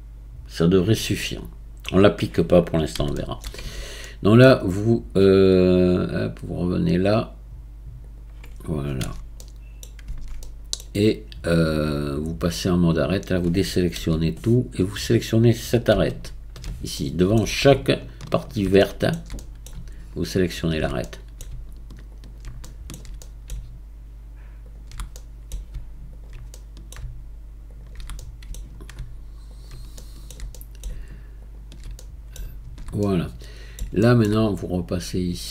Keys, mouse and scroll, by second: 1.2-3.7 middle drag, 3.7 Tab, 4.0-6.1 middle drag, 6.1-8.0 scroll down 4, 8.0 click, 9.2 Tab, 9.4-10.1 middle drag, 10.1 Tab, 10.4-12.2 middle drag, 12.2 click, 13.1-14.0 scroll up 1, 14.0-14.3 scroll up 1, 14.3 a, 16.1 alt+click, 17.0-18.2 middle drag, 18.2 alt+shift+click, 18.8-20.5 shift+middle drag, 20.5 alt+shift+click, 21.0-22.1 middle drag, 22.1 alt+shift+click, 22.6-24.6 shift+middle drag, 24.6 alt+shift+click, 25.2 middle click, 26.1 alt+shift+click, 26.5-27.7 shift+middle drag, 27.7 alt+shift+click, 28.2-29.5 middle drag, 29.5 alt+shift+click, 30.0-31.4 shift+middle drag, 31.4 alt+shift+click, 32.0-34.9 middle drag, 34.9-35.5 scroll down 6.